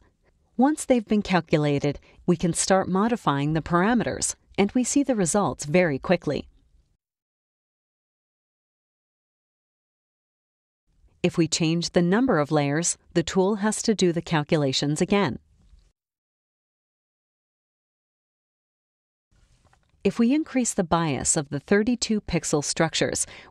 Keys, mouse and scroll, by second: 2.0 click, 3.3 click, 4.6 click, 5.7-7.2 drag, 8.0 click, 8.6 click, 9.1 click, 11.3 click, 12.7 click, 14.4 click, 20.2 click, 21.3 click.